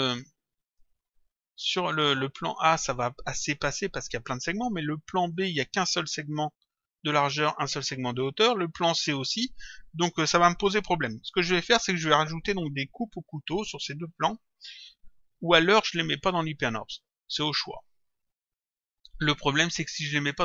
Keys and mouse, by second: 0.1 click, 5.3 click, 8.9 click.